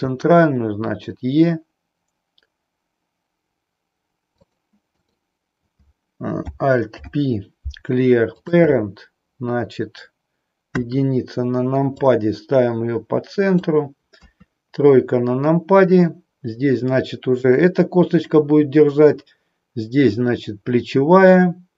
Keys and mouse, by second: 4.5 click, 5.0 click, 6.8 alt+p, 10.6 KP_1, 12.1-13.6 drag, 14.2 KP_3.